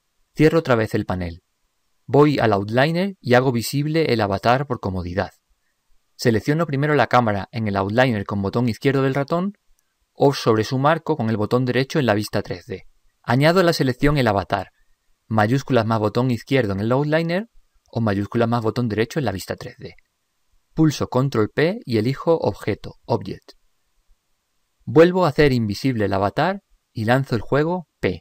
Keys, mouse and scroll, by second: 2.5 n, 5.4-7.1 drag, 9.3-11.0 drag, 11.2 click, 16.5-18.4 drag, 21.8 ctrl+p, 26.2-28.0 drag.